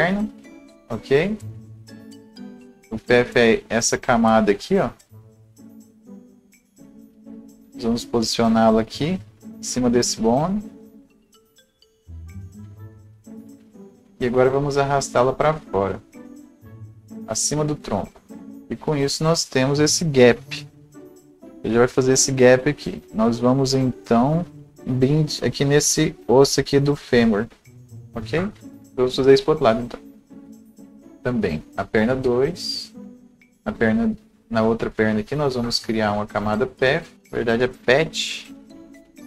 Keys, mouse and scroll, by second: 3.5-18.5 drag, 18.5-20.4 scroll down 1, 20.4 Escape, 20.4 ctrl+r, 21.0-22.8 scroll up 1, 24.7 click, 27.2 click, 29.8 click, 38.4 click, 39.1 scroll down 1.